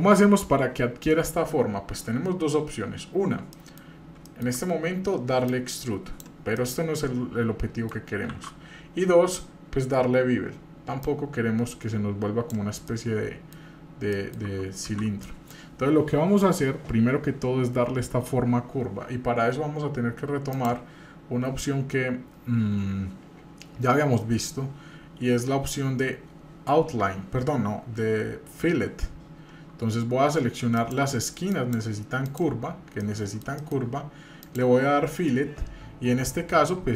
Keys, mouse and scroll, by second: 3.5 middle drag, 3.9-4.2 scroll up 2, 4.3 shift+middle click, 5.5 click, 6.5-7.9 middle drag, 8.3 ctrl+z, 9.0-11.0 scroll down 3, 11.0-12.5 drag, 12.9 middle click, 13.8-14.1 scroll up 1, 14.1 middle click, 14.9 ctrl+z, 15.2 middle click, 20.5 click, 30.1 Tab, 30.8 click, 31.5-32.5 shift+drag, 33.0 middle click, 33.5 shift+middle click, 34.4 click.